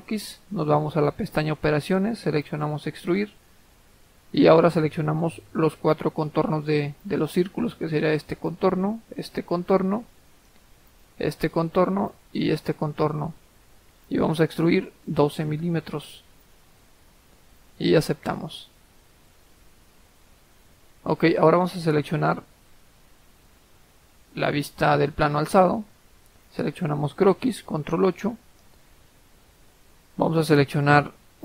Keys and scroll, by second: 15.2-16.2 typing, 27.7 ctrl+8.